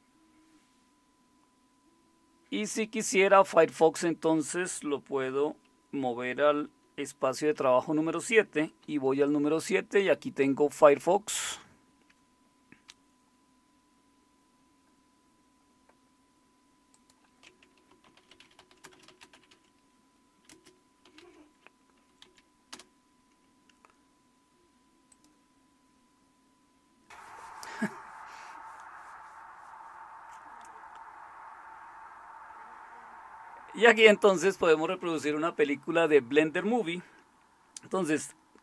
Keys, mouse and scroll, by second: 0.7 typing, 7.5 shift+super+/, 8.8 super+7, 12.1-14.0 drag, 17.6-21.7 typing, 22.2 Down, 22.7 Return, 24.2 typing, 25.1 click.